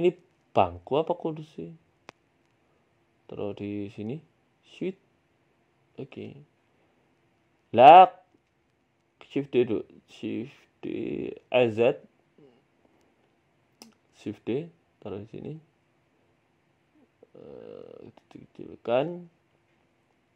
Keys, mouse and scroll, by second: 0.0 right click, 0.3 s, 2.0 right click, 2.1 Tab, 2.8 g, 6.6 middle click, 6.9 Tab, 7.0 middle click, 7.5 KP_3, 8.3 right click, 9.0 shift+d, 9.7 r, 10.8 g, 12.1 s, 13.1-13.7 scroll up 1, 13.7 right click, 14.3 right click, 14.8 shift+d, 17.8 s, 19.4 click, 19.8 middle click.